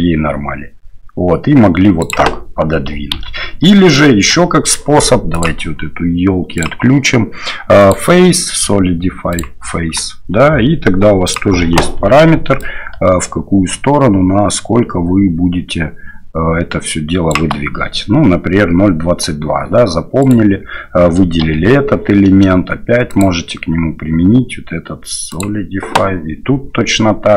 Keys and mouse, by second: 3.1 ctrl+z, 4.0 shift+middle click, 5.4-6.9 drag, 7.8-9.4 drag, 11.2 click, 12.8-17.3 shift+drag, 20.2 right click, 23.2-25.4 drag, 23.2 l.